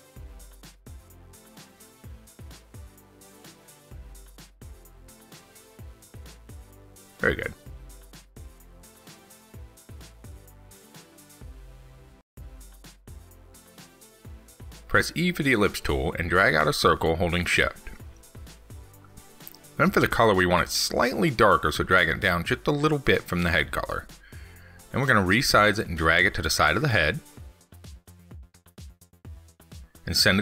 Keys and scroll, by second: 3.7 ctrl+z.